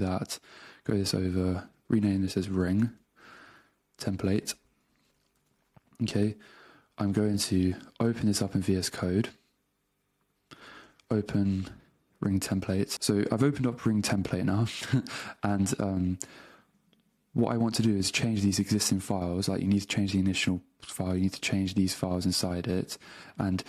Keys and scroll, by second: 2.8 g, 3.0 space, 5.3 Return, 7.6 super+Tab, 10.9 super+o, 12.5 Return.